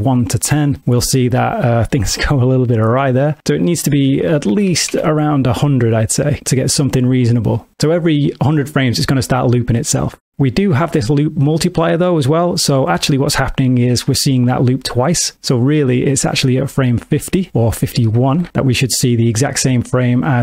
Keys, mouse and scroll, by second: 0.8 space, 2.0 space, 3.6 click, 4.7 KP_0, 6.4 space, 16.8 click, 18.4 Right, 18.5 Right.